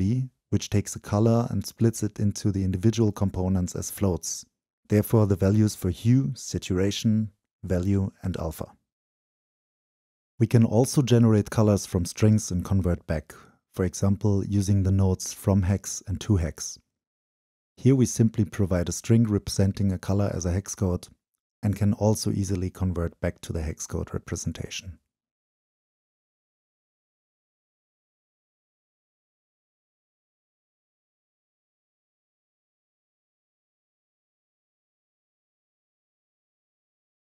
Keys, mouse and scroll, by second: 0.0 drag, 0.8-2.7 drag, 3.2 click, 3.7 click, 4.9-5.7 middle drag, 5.7 click, 6.1-6.8 middle drag, 6.8 click, 7.8-8.6 middle drag, 8.6-9.1 drag, 9.1-11.0 middle drag, 11.0 drag, 11.3-12.6 right drag, 12.6 click, 17.3 Return, 18.5-19.3 drag, 19.3-19.9 middle drag, 19.9-22.1 drag, 22.1 click, 22.8-25.3 drag, 25.3-26.7 middle drag, 26.7-28.9 drag, 28.9 Return, 29.9-33.6 drag, 33.6 middle click, 34.2-37.1 drag.